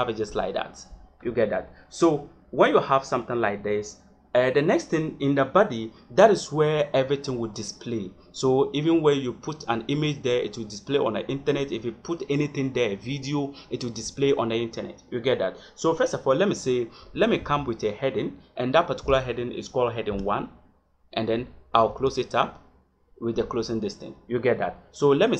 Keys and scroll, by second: 0.6 Return, 17.3 shift+,, 19.0 h, 21.8 shift+..